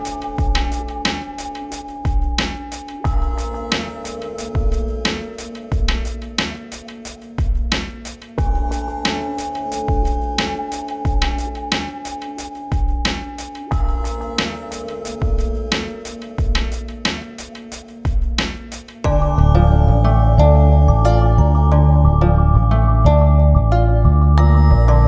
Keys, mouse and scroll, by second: 0.6 scroll down 1, 2.3 click, 2.6 ctrl+space, 6.2 ctrl+u, 6.5-10.0 drag, 10.0 scroll down 1, 10.8 click, 11.6 scroll up 1, 12.2 shift+click, 12.8 ctrl+g, 13.1 shift+click, 13.3 e, 13.8-17.9 shift+drag, 17.9-20.8 drag, 21.3 shift+F2, 23.1 click, 23.9 ctrl+s, 24.4-25.0 drag.